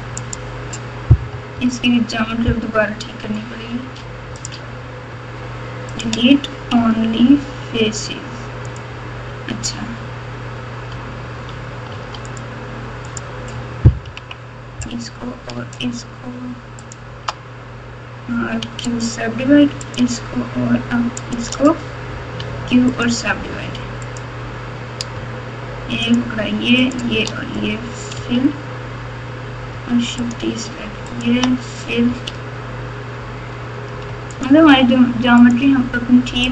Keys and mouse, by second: 1.3 KP_4, 1.5 KP_4, 3.8 3, 4.3 click, 5.9 shift+click, 6.7 x, 11.9 1, 12.3 click, 14.0 KP_6, 16.8 shift+click, 18.6 q, 19.9 click, 22.3 q, 24.0 click, 26.1 shift+click, 26.8 shift+click, 28.1 f, 30.1 shift+click, 31.1 shift+click, 32.0 f, 34.3 shift+click, 35.4-36.5 shift+drag.